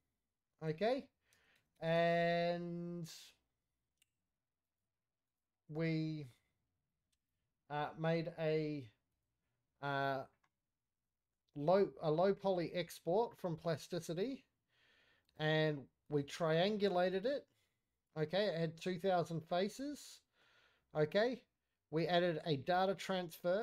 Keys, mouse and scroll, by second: 7.6 click, 13.0 middle click, 13.0-15.5 scroll down 2, 16.3 click, 17.7-18.4 scroll up 1, 18.4 middle click.